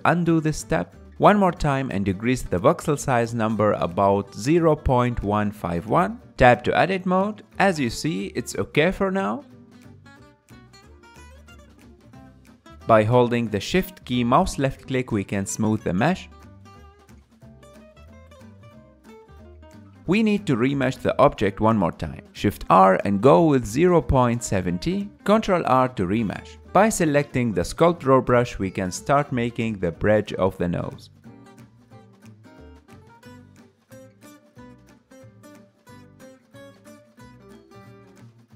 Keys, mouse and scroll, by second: 0.4 Tab, 1.0 middle click, 1.4 shift+r, 5.8 ctrl+r, 6.3 middle click, 7.3 Tab, 7.6-10.6 middle drag, 11.8 KP_1, 12.8-16.6 shift+drag, 16.6 middle click, 16.8 shift+click, 16.9 middle click, 17.2 shift+click, 17.2 middle click, 17.3 shift+click, 17.4 middle click, 17.6 shift+click, 17.8 middle click, 17.9 shift+click, 18.0 middle click, 18.2 shift+click, 18.5 ctrl+middle click, 18.8 KP_1, 19.0 ctrl+shift+middle click, 20.9 ctrl+middle click, 21.4 shift+r, 26.6 ctrl+r, 27.3-28.8 drag, 28.8-30.1 middle drag, 30.1-33.3 drag, 33.3-34.8 middle drag, 34.8 click, 35.8-36.8 middle drag, 36.8-38.5 drag.